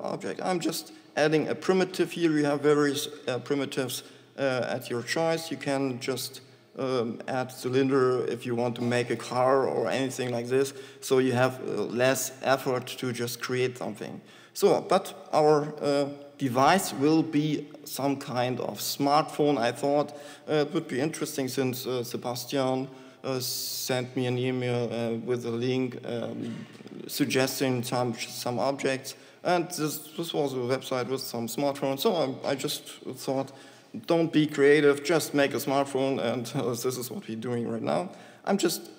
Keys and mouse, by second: 15.6 s, 28.4 click, 38.4 shift+s.